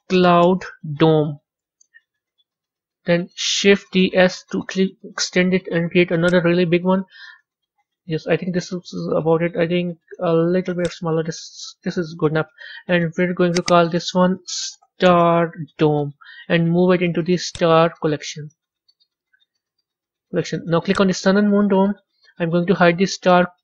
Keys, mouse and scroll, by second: 2.6-3.7 scroll down 3, 3.7 shift+d, 6.7-9.7 middle drag, 9.7 s, 11.2-13.5 middle drag, 13.5-16.6 drag, 17.4 click, 20.8 click, 21.6-23.6 middle drag.